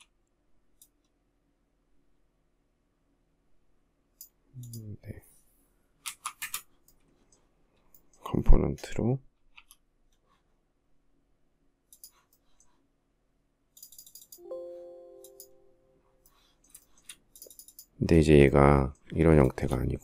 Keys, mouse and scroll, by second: 5.0-5.8 typing, 8.8 g, 16.0 shift+middle click, 18.6 shift+middle click, 19.6 shift+middle click.